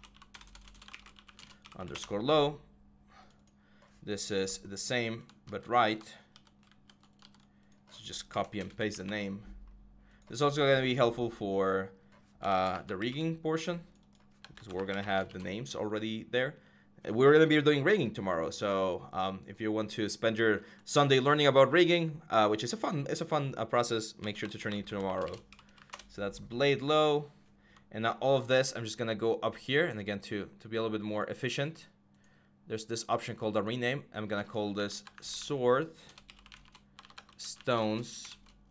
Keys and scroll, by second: 0.0-2.2 typing, 5.3 ctrl+v, 6.1 ctrl+z, 6.5 ctrl+c, 7.0 ctrl+v, 8.1 Right, 8.4 BackSpace, 8.7 r, 12.1-15.5 typing, 23.9-26.2 typing, 34.7-38.1 typing.